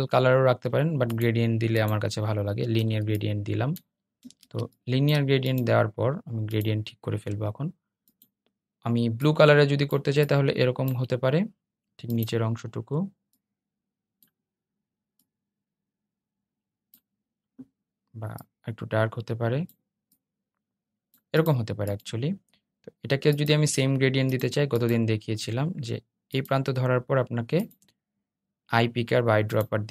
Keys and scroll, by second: 3.3 super+z.